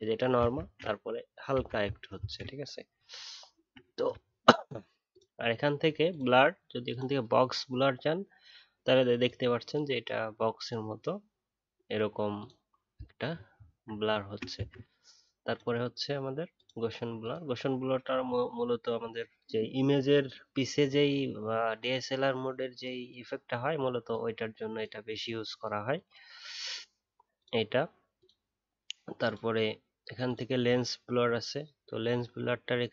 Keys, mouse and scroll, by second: 3.0-3.6 alt+scroll down 1, 3.7-5.3 alt+scroll down 4, 12.9 alt+scroll down 6, 14.2 alt+scroll down 1, 14.2 alt+scroll up 3, 14.5 ctrl+z.